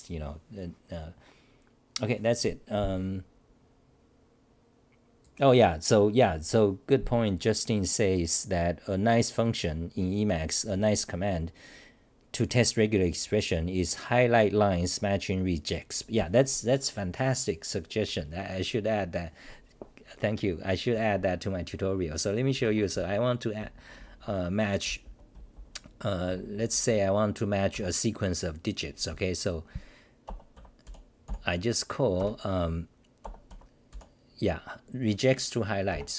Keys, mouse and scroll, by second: 25.3 Return.